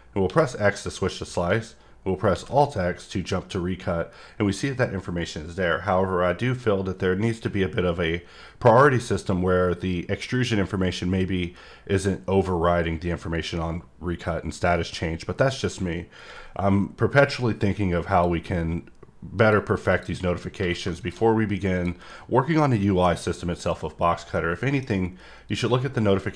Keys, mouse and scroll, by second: 14.9 middle click, 16.8-17.1 scroll down 2, 18.1 click, 19.4 click, 19.9 click, 21.0 click, 21.4 scroll down 1, 21.7 click, 22.1 middle click, 24.3 middle click, 25.5 click.